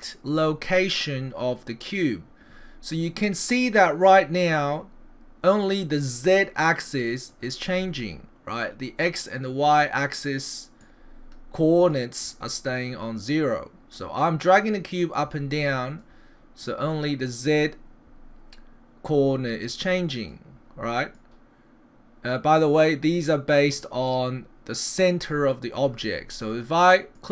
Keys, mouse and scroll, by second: 5.6 click, 10.8 click, 15.2 click, 16.6 click, 21.2 click, 24.1 middle click, 26.4 click.